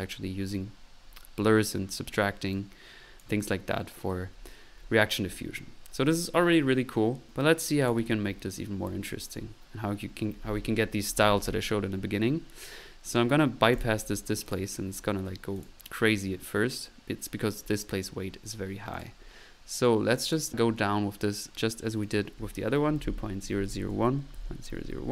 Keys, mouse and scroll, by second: 0.1 drag, 2.5-3.6 drag, 7.3 click, 8.9 click, 11.6 middle click, 13.7-14.3 drag, 14.4 click, 15.5 click, 15.7 1, 22.3 click.